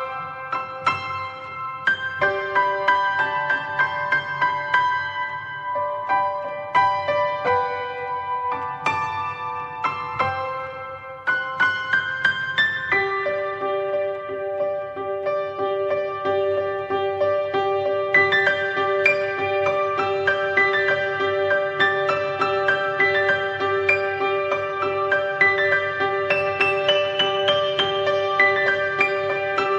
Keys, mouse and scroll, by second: 0.7-2.9 drag, 2.9 scroll down 1, 3.5-4.8 drag, 5.2-6.5 middle drag, 6.5-9.0 drag, 9.0-9.6 scroll up 1, 9.6-10.0 scroll down 1, 10.0 middle click, 10.3 drag, 11.5 click, 15.3-15.8 alt+middle drag, 15.8 alt+scroll up 1, 16.4-17.1 alt+middle drag, 17.1-17.8 scroll up 1, 17.8 r, 19.9 s, 20.9 scroll down 3, 21.1-22.5 middle drag, 22.5 click, 23.6 click, 28.4 click.